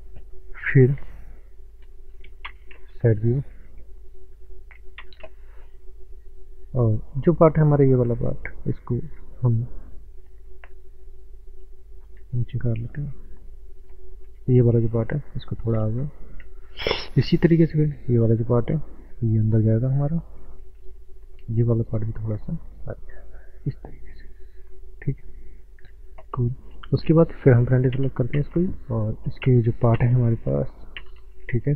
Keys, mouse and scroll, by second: 0.3 scroll up 1, 2.5 ctrl+space, 3.7 shift+middle click, 5.0 ctrl+space, 5.7 middle click, 7.0 shift+middle click, 7.7 click, 8.1 middle click, 8.8 shift+middle click, 10.3 click, 12.9 middle click, 13.8 click, 16.1 middle click, 16.7 shift+middle click, 18.2 click, 18.5 middle click, 20.1 click, 21.0 middle click, 21.8 click, 23.9 Tab, 24.3 middle click, 26.3 Tab, 27.9 ctrl+space, 29.5 ctrl+space.